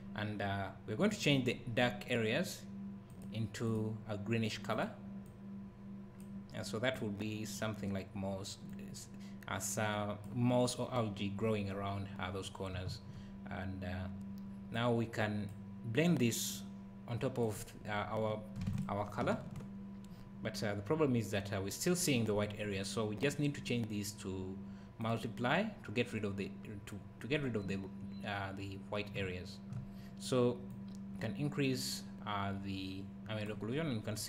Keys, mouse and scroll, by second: 12.9 `, 14.8 click, 16.1 click, 18.8 ctrl+shift+click, 23.2 click, 27.3 scroll up 1, 29.2 `, 30.7 click, 33.8 scroll up 1, 34.1 scroll down 1.